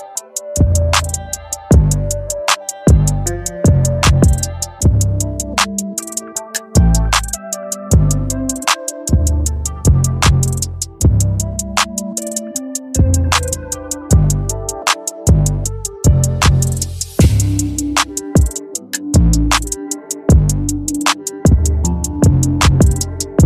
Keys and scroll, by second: 5.5 Return, 11.1 ctrl+t.